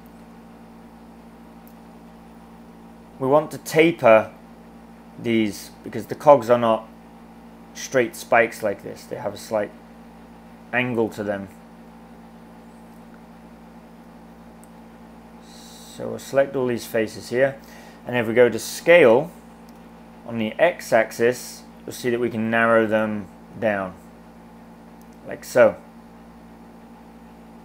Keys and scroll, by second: 18.8 s, 19.7 x.